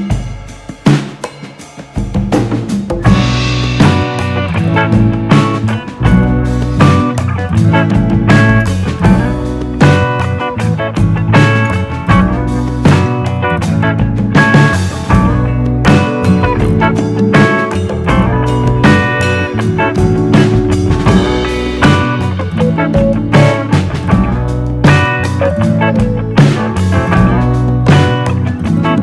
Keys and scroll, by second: 4.4 d.